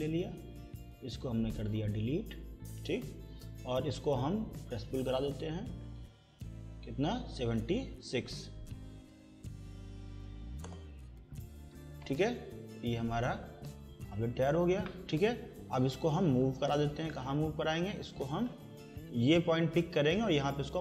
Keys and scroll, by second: 2.5 Delete, 8.4 7, 10.3 6, 10.6 Return, 12.7 Escape.